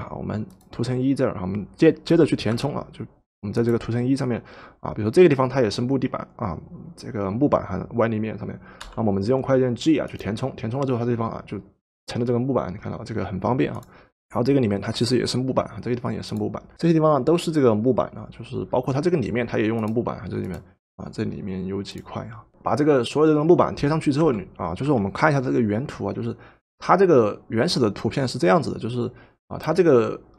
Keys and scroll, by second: 2.1 g, 8.8 g, 24.2 v.